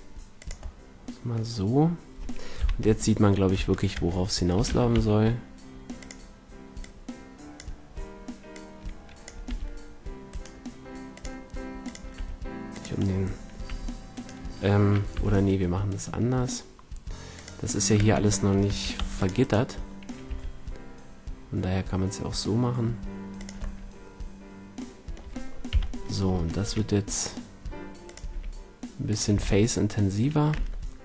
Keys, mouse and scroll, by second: 2.4 click, 2.5 KP_3, 4.4 s, 6.0-12.8 drag, 9.4 r, 12.0 r, 13.6 r, 14.2-16.0 right drag, 15.0 g, 17.4-19.8 drag, 17.9 Tab, 18.6 a, 18.9 c, 20.2 g, 23.4-24.1 drag, 24.1-24.9 middle drag, 25.1 middle click, 25.6 KP_3, 26.6 e, 28.1-29.4 drag, 28.2 e, 29.2 a, 30.4 Tab.